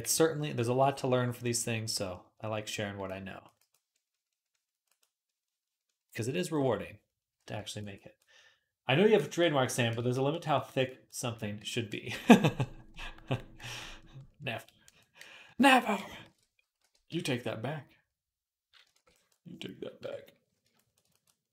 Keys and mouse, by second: 0.1 alt+q, 4.7-7.9 drag, 4.7-7.9 middle drag, 4.7-7.9 right drag, 11.5-13.3 middle drag, 16.1 alt+q, 16.6 r, 18.8 ctrl+r, 19.8 KP_1.